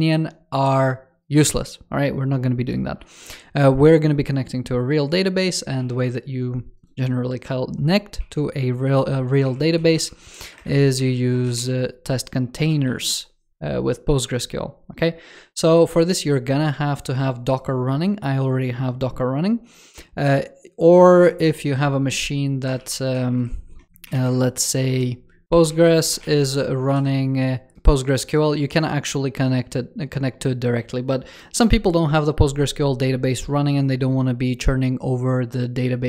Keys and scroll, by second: 5.7 super+w, 8.1 super+3, 21.0 super+2.